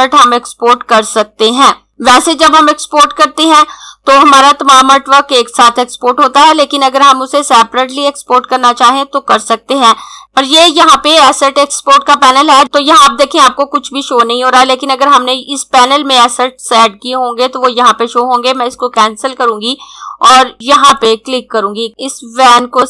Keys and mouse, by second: 10.2 click, 18.6 click, 20.9 click.